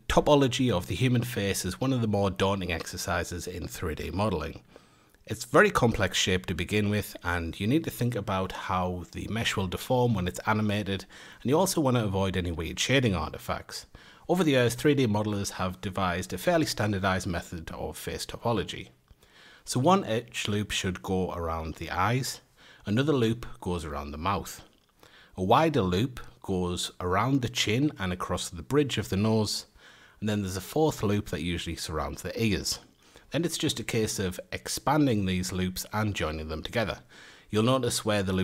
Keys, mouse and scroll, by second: 0.0 F8, 2.8-4.5 scroll up 7, 5.6 click, 6.2-6.9 scroll up 1, 6.9-8.8 middle drag, 8.8 Tab, 12.2 3, 13.6 alt+shift+click, 13.9 ctrl+KP_Add, 15.4 click, 15.9-16.8 middle drag, 16.8 a, 17.7 alt+shift+click, 18.3 ctrl+KP_Add, 19.4 click, 20.0 middle click, 20.2 a, 22.0 alt+shift+click, 22.5 a, 22.6 scroll up 2, 22.9-23.4 scroll down 1, 23.4 alt+shift+click, 23.7-24.5 scroll down 1, 24.8 ctrl+KP_Add, 25.5 ctrl+KP_Subtract, 25.9 ctrl+KP_Subtract, 26.3 ctrl+KP_Add, 27.6 click, 28.0 middle click, 28.7 a, 29.0-30.0 middle drag, 30.0 alt+shift+click, 30.5 alt+shift+click, 31.5 ctrl+KP_Add, 32.6 scroll down 1, 33.3 ctrl+KP_Subtract, 34.0 click, 34.3-35.9 middle drag, 35.9 a, 36.8 alt+shift+click, 37.2 scroll up 1, 37.3-37.7 scroll down 1, 37.7 click.